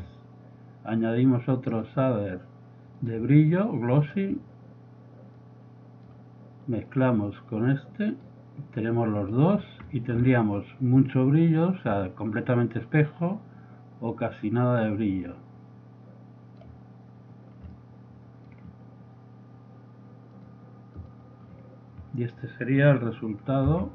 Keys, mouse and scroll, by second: 3.8 click, 4.8-6.2 drag, 9.5 middle click, 9.5 scroll up 2, 9.6 middle click, 12.4-13.9 drag, 14.6 click, 17.8-18.2 middle drag, 18.3 middle click, 23.8 F12.